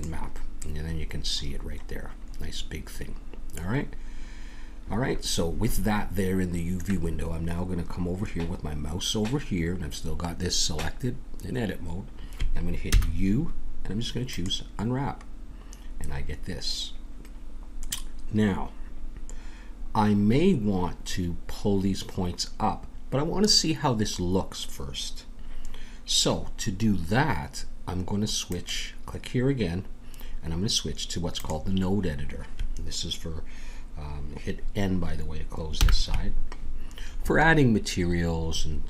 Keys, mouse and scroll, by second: 0.5-3.6 drag, 12.9 u, 28.5-30.5 drag, 35.8 n.